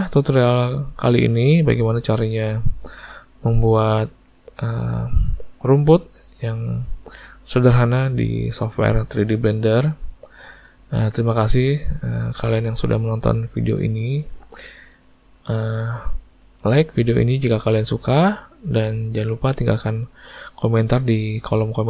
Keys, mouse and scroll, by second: 1.7 click, 2.4 shift+middle click, 3.0 middle click, 5.6 click, 6.7 click, 9.1 middle click, 9.8 alt+a, 10.3 middle click, 11.5 click, 14.0 alt+a, 15.3 click, 17.0 click, 18.2 click.